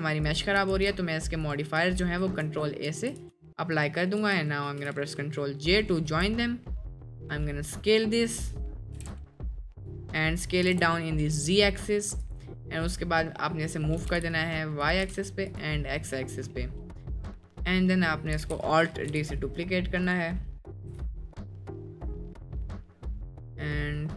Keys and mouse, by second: 0.3 click, 0.8 ctrl+a, 1.5 click, 2.0 ctrl+a, 2.5 ctrl+a, 2.9 ctrl+a, 4.7 ctrl+j, 6.2 s, 8.6 middle click, 9.0 s, 10.1 middle click, 10.7 s, 12.2-12.9 drag, 14.0 g, 15.0 g, 15.8 middle drag, 16.5-16.9 middle drag, 17.3 middle drag, 18.4 alt+d, 19.1 g, 20.8 KP_Decimal, 21.7 middle click, 22.3 middle drag, 23.3 click, 23.4 middle click.